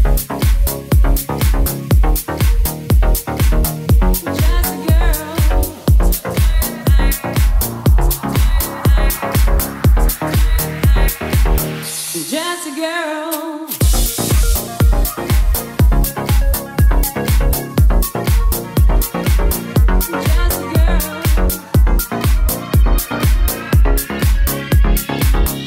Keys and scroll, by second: 1.1 Left, 1.8 Left, 3.0 super+s, 10.3-17.0 typing, 18.2 BackSpace.